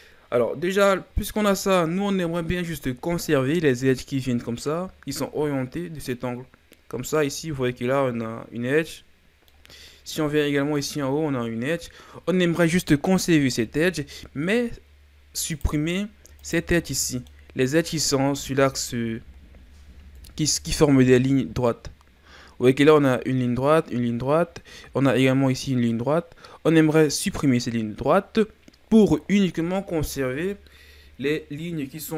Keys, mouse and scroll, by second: 0.7 right click, 1.4-4.5 scroll down 2, 9.3 scroll down 1, 9.5-12.6 middle drag, 15.5 right click, 16.3 shift+right click, 16.9-19.4 middle drag, 19.4 scroll down 1, 20.2 KP_7, 22.6-25.7 scroll up 1, 26.9-29.9 middle drag.